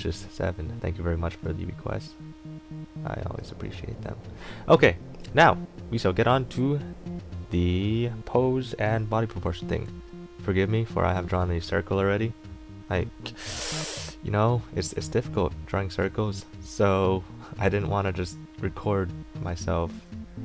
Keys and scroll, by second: 14.8 a.